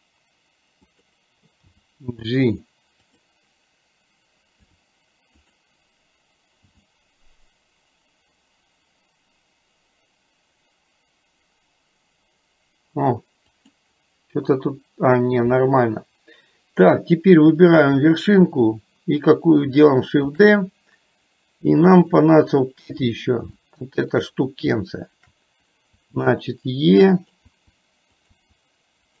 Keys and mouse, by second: 1.8 g, 4.6 r, 6.6 g, 17.8 click, 20.4 shift+d, 23.6 shift+middle click, 27.5 e.